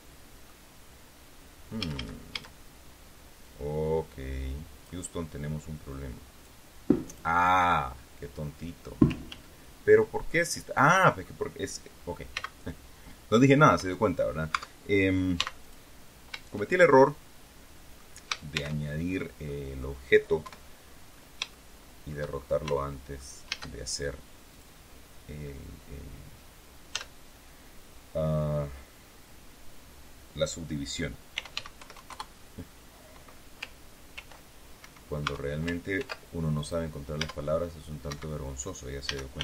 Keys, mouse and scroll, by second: 1.7 a, 3.3-4.9 drag, 5.1 middle click, 6.3 click, 9.2 ctrl+z, 10.3-11.3 ctrl+drag, 12.2 x, 13.6 Escape, 14.4 Tab, 15.3 x, 15.5 click, 17.0-18.0 drag, 18.4 shift+c, 19.4 middle click, 20.3 KP_1, 20.8-21.4 scroll up 2, 21.4 shift+middle click, 22.6 shift+middle click, 23.4 shift+a, 24.4 click, 26.8 z, 31.0-31.9 typing, 32.0 KP_Enter, 34.0 ctrl+r, 35.1 Tab, 35.9 ctrl+r, 36.4 click, 37.1 Tab, 38.0 Escape, 39.0 a, 39.3 b.